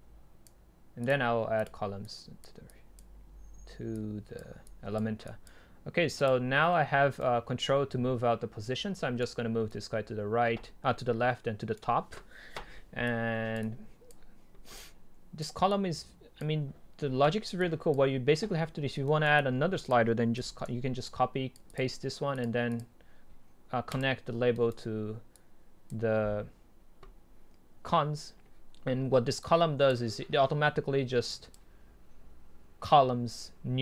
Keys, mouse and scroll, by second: 4.0-7.0 drag, 7.0 middle click, 7.2 right click, 10.1 right click, 10.3 right click, 13.1-13.7 drag, 20.4 ctrl+c, 20.7 ctrl+v, 23.9 click, 24.5-25.3 right drag, 25.3-27.8 drag, 29.5-33.7 drag.